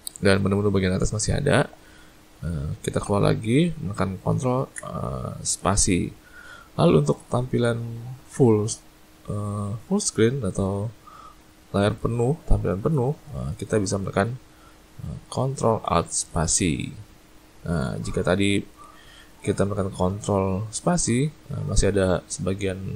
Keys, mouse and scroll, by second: 4.8 ctrl+space, 16.5 ctrl+alt+space.